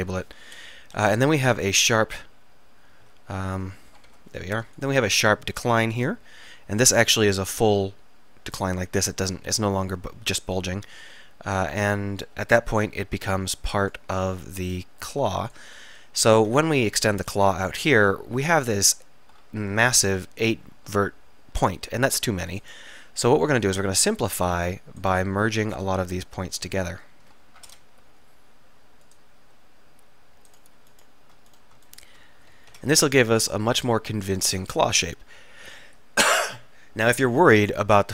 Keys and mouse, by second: 0.6 KP_1, 0.9 KP_3, 1.8 e, 5.3 s, 6.9-8.0 drag, 12.4 KP_3, 16.4 e, 17.7-19.6 drag, 22.7 click, 27.7 alt+m, 32.8 alt+m, 37.6-38.1 middle drag.